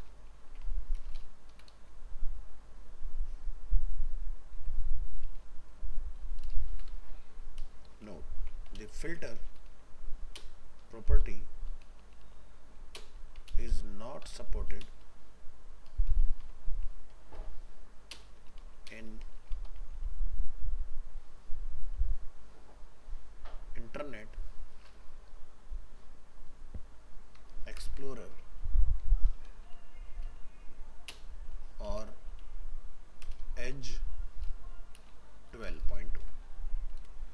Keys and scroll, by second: 36.2 ctrl+s.